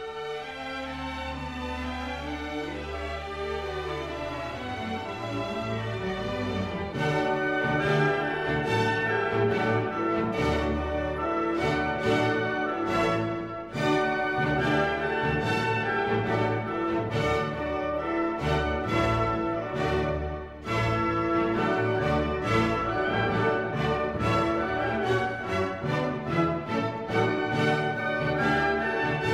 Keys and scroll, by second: 2.7 Down, 4.7 Up.